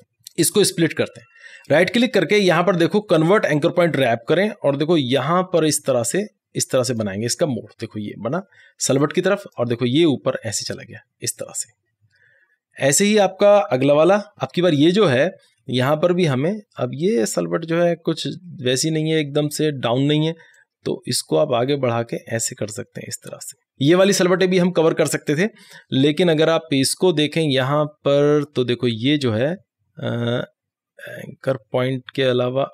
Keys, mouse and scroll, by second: 1.6 right click, 3.6-12.0 drag, 12.4 scroll down 1, 12.6 scroll up 1, 12.8 space, 12.8 click, 13.1 click, 14.0 alt+scroll down 1, 14.8 click, 15.6 alt+scroll up 1, 17.1-23.8 drag, 26.2-28.8 drag, 28.8-32.7 drag.